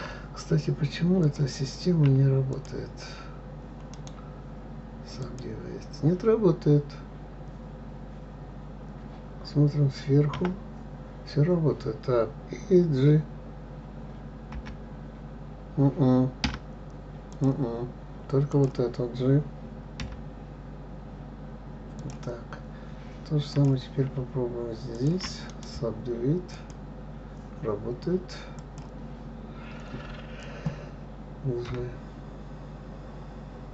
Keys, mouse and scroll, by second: 0.0-1.6 scroll up 3, 1.6 click, 2.9 shift+click, 4.3 right click, 5.8-7.3 right drag, 10.7 KP_7, 14.9 g, 17.7 click, 18.9 click, 20.4 g, 23.9 click, 25.3 shift+click, 25.9 right click, 27.1-29.0 right drag, 29.0 click, 32.1 g.